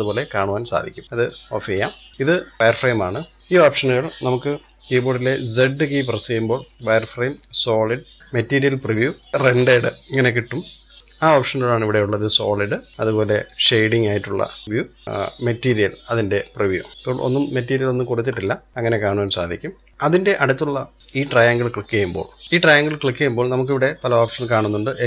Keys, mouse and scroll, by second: 1.2 click, 1.8 shift+middle click, 2.6 click, 3.2 click, 5.5 z, 14.2 click, 16.9-19.9 middle drag, 19.9 click.